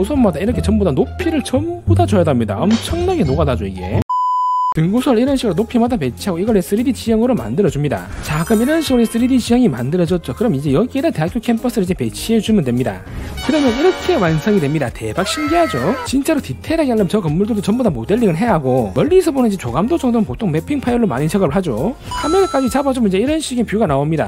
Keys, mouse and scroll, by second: 0.0 alt+middle click, 3.5 alt+middle click, 4.7 middle click, 5.9 click, 9.2 middle click, 9.7-10.7 alt+middle drag, 11.2 scroll up 2, 11.4 alt+middle click, 12.0 click, 12.6 alt+middle click, 15.0 alt+middle click, 15.4 middle click, 15.9 click, 16.4 alt+middle click, 17.4-18.4 alt+middle drag, 18.8-19.3 scroll down 2, 19.4 scroll up 4, 20.1 alt+middle click, 21.5 scroll, 21.8 alt+middle click.